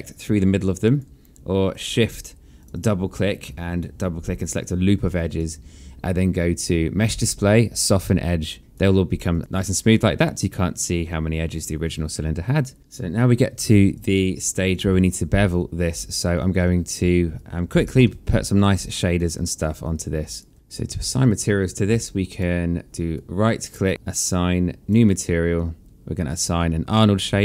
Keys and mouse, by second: 1.3 click, 2.2 shift+click, 3.1 alt+click, 4.7 alt+click, 6.7 click, 8.6 right click, 8.9 click, 9.1 alt+click, 12.7 click, 13.4 click, 15.0 alt+click, 16.8 alt+click, 17.5 alt+middle click, 17.9 alt+click, 20.5 alt+click, 21.7 alt+middle click, 22.1 alt+click, 22.9 right click, 26.5 click.